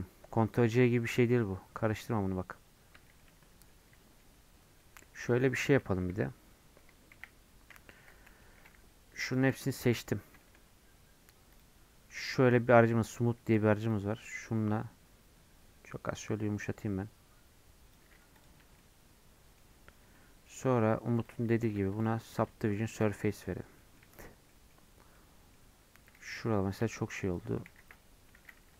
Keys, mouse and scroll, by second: 4.0-6.0 middle drag, 19.2-20.6 middle drag, 25.5-28.7 middle drag.